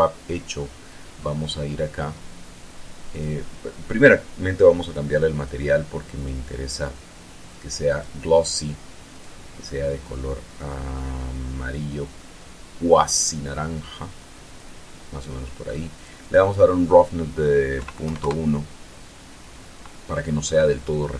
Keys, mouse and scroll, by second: 0.9-1.9 middle drag, 3.6 click, 5.3 click, 5.9 click, 8.3 click, 9.6 click, 10.5-15.3 drag, 16.4 click, 18.3 KP_Decimal, 18.5 KP_1, 18.7 KP_Enter.